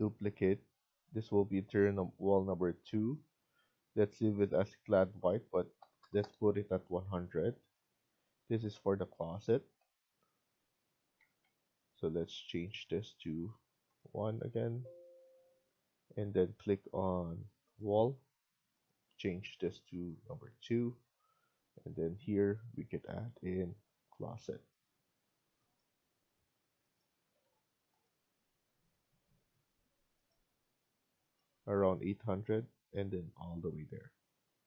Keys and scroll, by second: 5.8-6.6 typing, 11.1 Escape, 11.3 Escape, 14.1 Escape, 14.4 Escape, 27.1 Escape, 27.3 Escape, 29.8 Escape, 32.0 Escape.